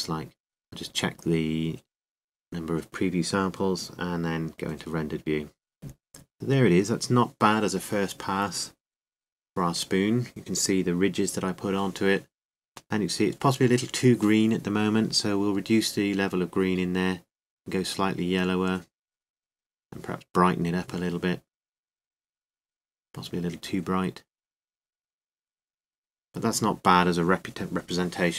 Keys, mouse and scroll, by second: 2.8 middle click, 5.0-6.5 drag, 9.9 middle click, 10.7 middle click, 11.7 middle click, 13.8 middle click, 25.5-26.6 drag.